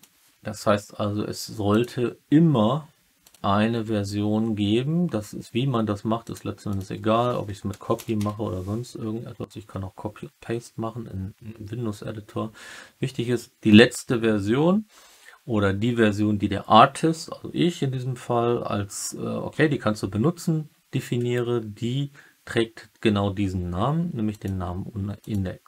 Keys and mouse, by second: 1.6-3.3 drag.